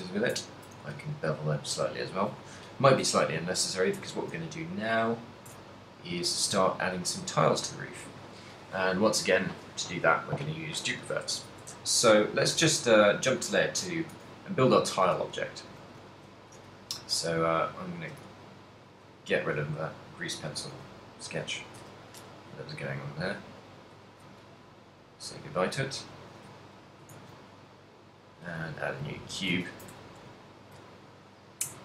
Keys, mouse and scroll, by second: 0.0-1.3 typing, 0.6 ctrl+middle click, 1.5 middle click, 3.2 KP_3, 4.2 Tab, 5.1 middle click, 5.7 a, 6.2 right click, 7.2 shift+right click, 11.7 Tab, 12.0 a, 13.9 2, 16.1 shift+c, 17.2 s, 17.6 d, 18.3 d, 18.6 right click, 19.6 d, 20.0 right click, 20.2-20.6 d, 20.7 click, 20.7 d, 21.1 shift+middle click, 21.8 KP_1, 22.5 d, 22.8 right click, 24.2 click, 24.2 d, 24.8 d, 25.0 right click, 25.7 right click, 25.7 d, 26.2 right click, 26.2 d, 26.6 shift+middle click, 27.3 shift+a, 28.6 shift+a, 29.2 g, 29.5 right click, 29.7 ctrl+middle click, 30.2 shift+middle click, 30.5 ctrl+middle click.